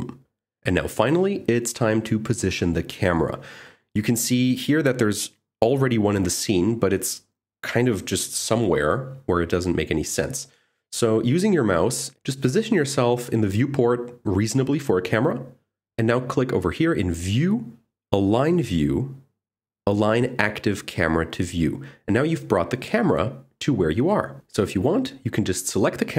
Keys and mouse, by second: 3.9 click, 6.8 click, 17.2-20.3 drag, 21.8 click, 25.7 g.